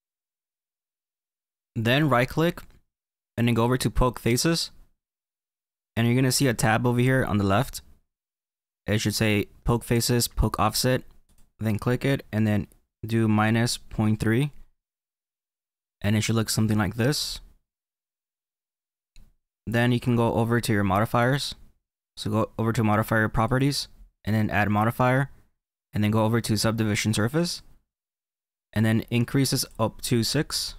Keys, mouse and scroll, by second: 2.3-5.3 right drag, 6.3 F15, 11.2 click, 15.8 middle click, 16.4 middle click, 20.1 F14, 23.4 click, 24.8 click, 29.5 click.